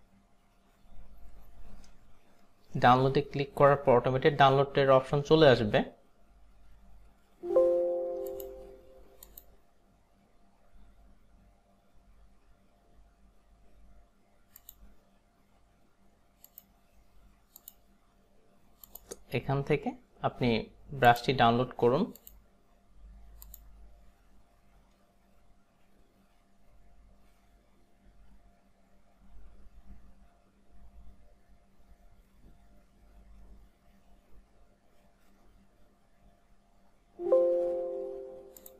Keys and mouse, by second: 8.3 click, 14.7 click, 16.5 click, 17.7 click, 18.9 click, 21.6 click, 22.3 click, 23.6 click, 38.6 click.